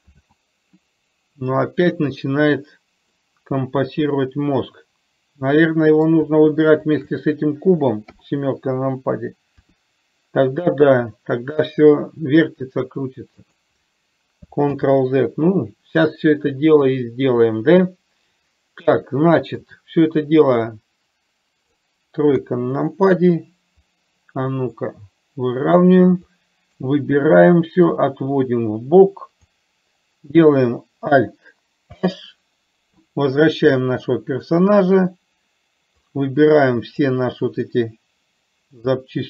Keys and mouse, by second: 0.3 ctrl+z, 3.3-6.3 middle drag, 7.1 shift+click, 8.4 KP_7, 9.9 r, 15.0 ctrl+z, 17.1-19.8 middle drag, 21.0-21.9 drag, 22.6 KP_1, 25.0-26.1 drag, 26.5 click, 28.3-29.8 drag, 32.1 alt+h, 36.3-37.3 drag.